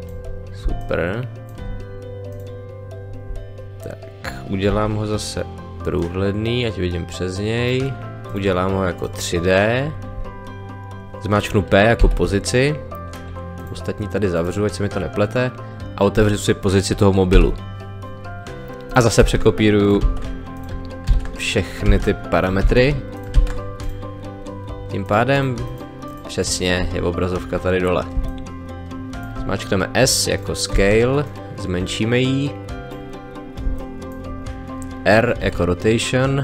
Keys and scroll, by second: 4.7 t, 12.0 p, 17.3 p, 19.2 ctrl+c, 20.0 ctrl+v, 21.0 ctrl+c, 21.8 ctrl+v, 22.6 ctrl+c, 23.3 ctrl+v, 28.2 space, 30.7 s, 33.6 space, 35.4 r.